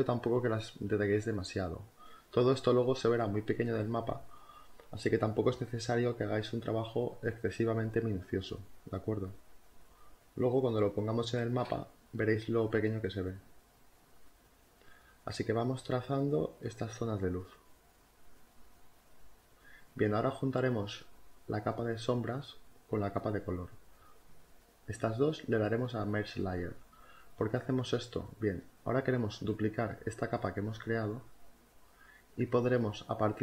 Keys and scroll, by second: 4.1 space, 7.5 ctrl+z, 12.7 ctrl+z, 13.0 ctrl+z, 16.0 ctrl+z, 16.0 space, 18.2 z, 26.3 space, 28.9 space.